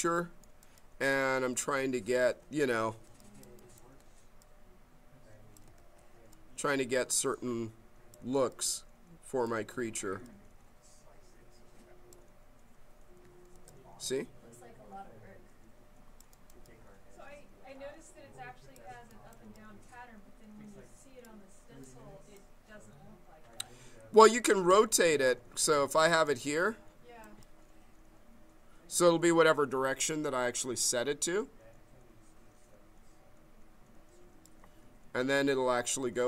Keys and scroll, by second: 1.4 s, 5.7 ctrl+z, 13.1 q, 24.7 s, 25.7 q, 26.2 s.